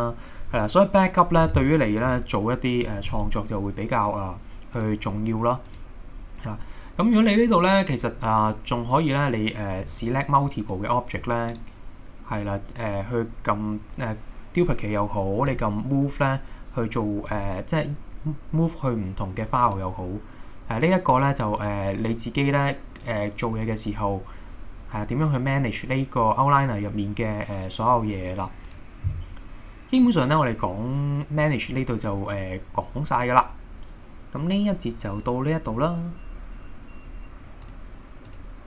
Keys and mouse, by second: 9.0 click, 11.5-12.5 right drag, 15.5 m, 21.2 click, 21.7 click, 23.0 click, 30.1-31.5 middle drag, 32.4 middle click.